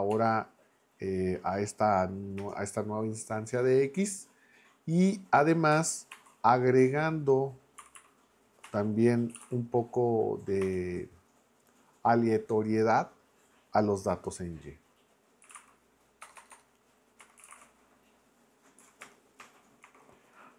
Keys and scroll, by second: 0.1 x, 2.4 Return, 6.1 shift+=, 7.5-9.9 typing, 10.6 Return, 15.2-18.0 typing, 18.8 Down, 19.0 Return, 19.8 shift+9.